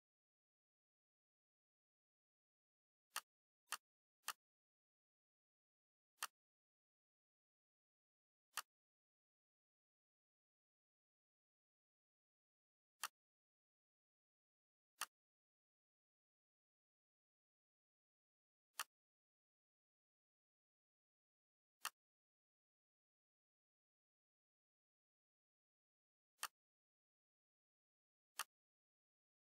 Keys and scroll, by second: 0.0 Up, 0.3 Up, 9.9 Right, 10.3 BackSpace, 11.0 2, 16.2 BackSpace, 16.7 3, 19.8 Right, 20.2 BackSpace, 20.8 4.